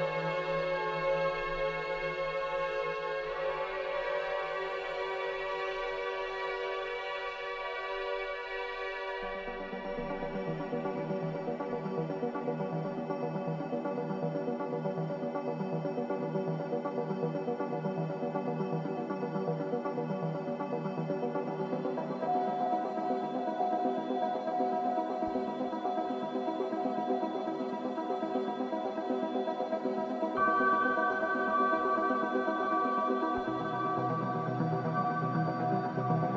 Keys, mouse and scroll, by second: 1.7 shift+a, 3.9-10.7 drag, 10.8 click, 12.6-13.0 scroll up 1, 13.0-14.6 middle drag, 15.7 s, 16.9 click, 17.5 click, 18.7 click, 19.3 scroll up 1, 19.9-22.0 middle drag, 22.0 s, 23.6 click, 26.3 click, 27.6 scroll up 1, 29.4 click, 34.5 click.